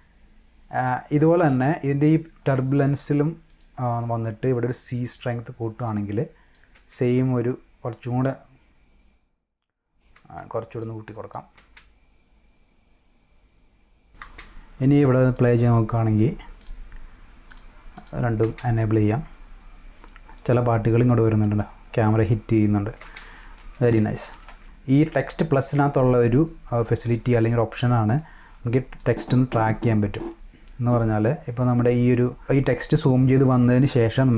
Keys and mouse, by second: 3.5 click, 5.9-6.5 drag, 10.8-11.3 drag, 14.2 space, 15.2 click, 16.6 click, 17.5 click, 17.9 click, 18.4 space, 23.0 space, 23.5 -, 23.9 -, 24.4 click, 29.0 click.